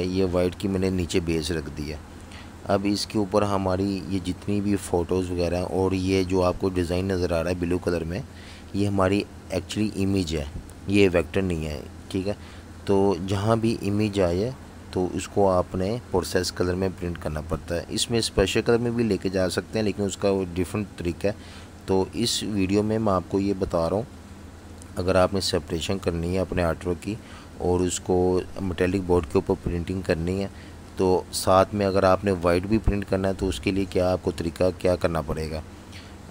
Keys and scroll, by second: 2.5 alt+super+3, 6.9 super+z, 9.3 super+3, 10.7 super+3, 17.0 super+3, 19.9 super+3, 21.3 super+-, 27.0 super+z, 32.5 super+z.